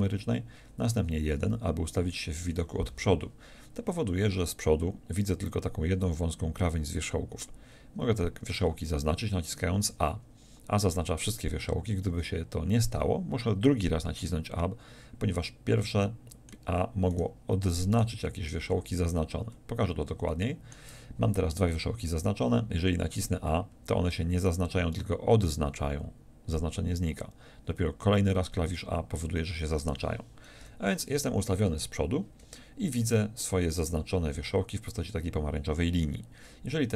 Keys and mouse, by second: 1.3 KP_1, 9.7 a, 23.7 a, 28.1 a, 30.6 KP_1.